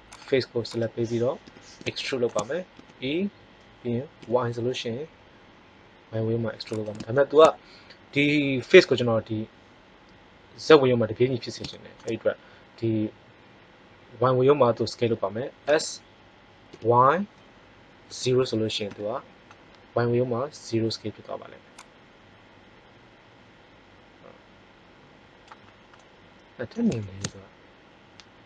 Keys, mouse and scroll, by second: 1.4 KP_3, 2.0 middle click, 2.7 e, 7.1-8.6 drag, 15.6 s, 21.7-22.8 drag, 25.6 middle click.